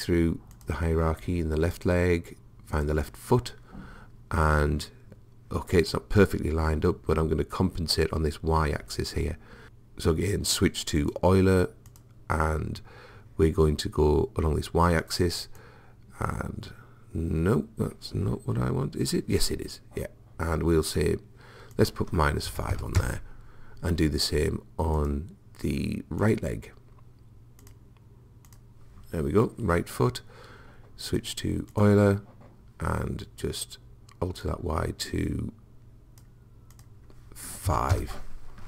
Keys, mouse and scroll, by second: 0.6-4.6 drag, 11.0 click, 15.6 click, 21.8 click, 25.0-30.4 drag, 31.1 click, 33.1-34.4 middle drag, 34.4 click, 36.4 middle click, 36.8 click.